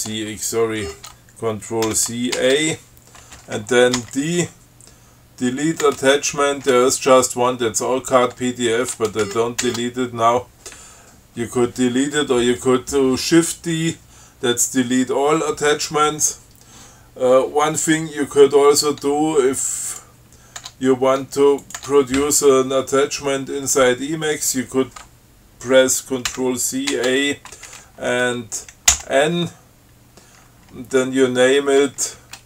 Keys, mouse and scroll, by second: 1.1 ctrl+g, 2.1 ctrl+c, 2.6 ctrl+a, 4.3 d, 6.1 Tab, 8.6 BackSpace, 9.5 ctrl+g, 20.1 click, 20.9 Tab, 21.9 click, 22.0 Tab, 26.5 ctrl+c, 27.1 ctrl+a, 29.1 n.